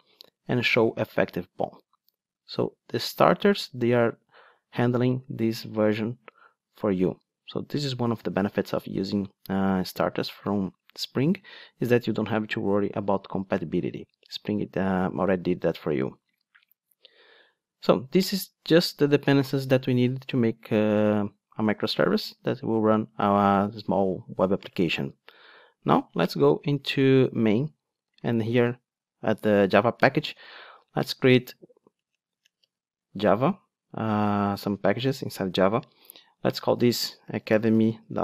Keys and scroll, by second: 30.5 super+n.